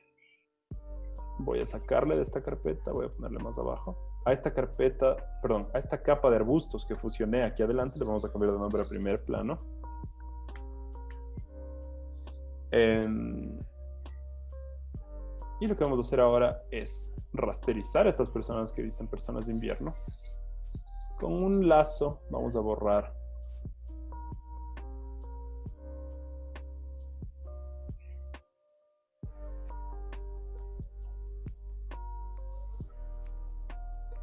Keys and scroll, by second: 8.4-9.7 typing, 11.2 Return, 13.9-14.4 typing, 20.8 l.